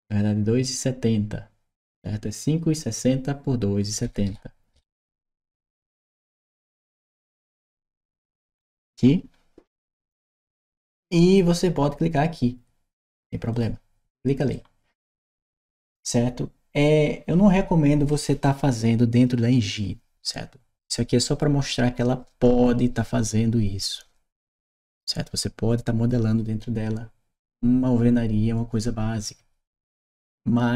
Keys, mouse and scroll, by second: 5.6 click, 6.3 click, 8.4 Return, 13.3 click, 14.3 right click.